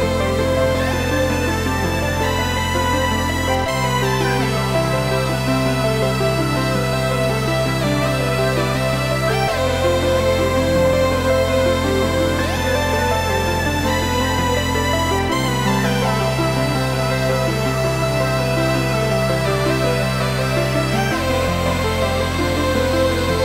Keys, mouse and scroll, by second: 0.1 click, 0.3 g, 1.7 click, 1.9 s, 2.7 click, 3.0 s, 4.3 click, 4.9 Tab, 5.1-9.4 middle drag, 6.2-7.7 scroll up 2, 8.0 i, 9.4 click, 11.7 e, 15.8 click, 16.1 Delete, 16.8 middle click, 17.2 scroll down 2, 17.5 middle click, 18.3 Tab, 18.5 scroll up 1, 19.0 g, 20.1 click, 20.4-23.4 middle drag, 21.0-21.3 scroll up 2, 21.9-23.2 scroll up 2.